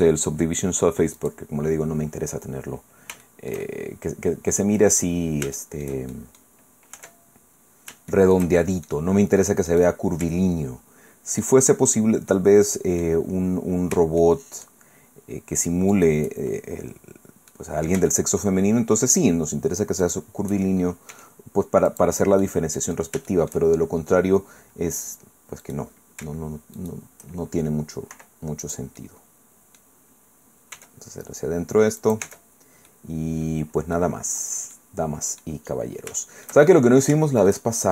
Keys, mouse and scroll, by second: 1.2 click, 2.2-2.7 scroll down 2, 2.7 scroll down 1, 3.2-4.9 shift+drag, 4.9 middle click, 5.4 shift+middle click, 6.9 Tab, 8.1 shift+middle click, 8.6 shift+middle click, 9.7 click, 11.4 shift+click, 12.3 middle click, 13.2-13.9 scroll up 1, 14.2 shift+middle click, 15.9 shift+right click, 17.5-18.6 drag, 20.0 shift+click, 21.1 e, 21.9-23.1 drag, 23.3 shift+click, 23.7 shift+middle click, 25.6 right click, 28.1 i, 28.6 click, 30.7 e, 32.0 click, 32.2 Tab, 32.9-34.1 drag, 34.3-34.7 scroll down 2, 34.7 middle click, 35.6-35.9 scroll up 2, 35.9 shift+middle click, 36.7 shift+click, 37.2 shift+middle click.